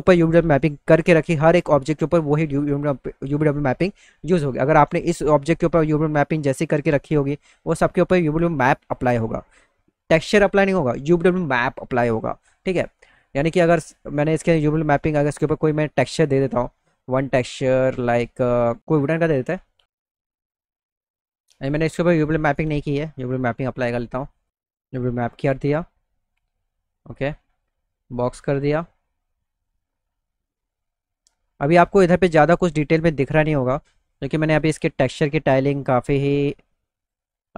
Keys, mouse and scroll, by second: 15.4 click, 16.4 ctrl+click, 17.4 ctrl+click, 19.1 ctrl+click, 21.7 click, 24.3 click, 24.6 click, 28.2 click, 32.2 middle click, 35.4 click.